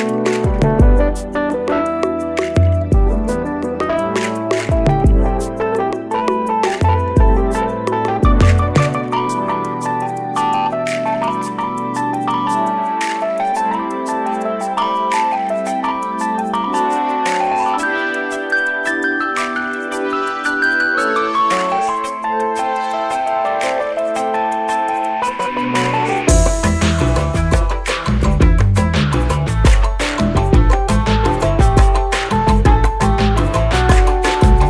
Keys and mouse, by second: 5.2-8.3 drag, 16.3 click, 18.5-21.1 drag.